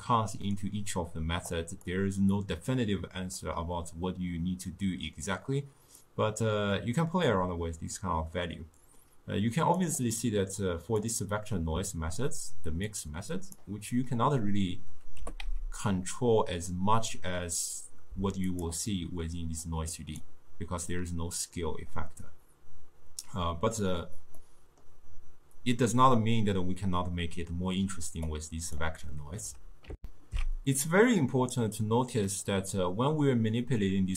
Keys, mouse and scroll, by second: 1.6-5.4 drag, 6.1-9.1 drag, 10.6 click, 12.9 click, 15.2 g, 19.7 click, 19.9-22.9 drag, 24.4-27.5 middle drag, 28.3 click, 30.0 ctrl+alt+shift+q, 32.3-34.1 middle drag.